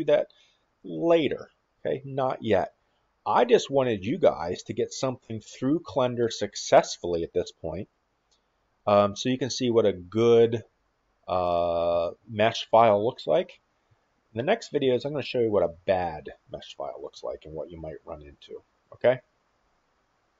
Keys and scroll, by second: 2.6-3.5 s, 3.8 a, 5.0 a, 5.2 a, 5.4 a, 5.6-6.5 a, 7.7-8.9 typing, 11.7-16.0 typing, 18.4-19.2 w.